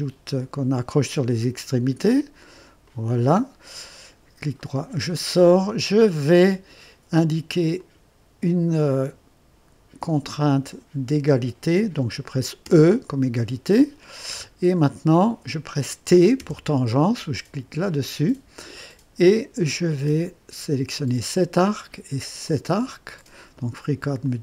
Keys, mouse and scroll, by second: 0.9 click, 2.8 click, 4.6 right click, 7.8 click, 10.3 click, 12.6 e, 14.5 scroll up 1, 16.1-16.9 typing, 20.9 click, 22.4 click, 24.2 click.